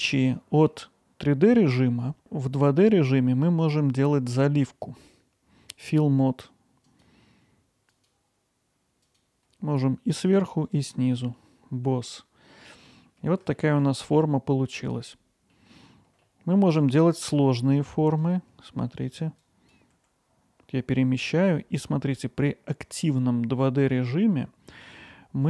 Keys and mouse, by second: 0.3-0.7 middle drag, 3.6-8.1 drag, 9.2-10.9 drag, 11.3-12.7 alt+middle drag, 13.0-13.3 ctrl+alt+middle drag, 13.6 alt+middle click, 14.0 middle drag, 14.7 alt+middle click, 15.5 middle click, 16.2-16.5 alt+middle drag, 18.9 alt+middle click, 19.6 click, 19.9 g, 22.8 click, 24.1-25.4 alt+middle drag.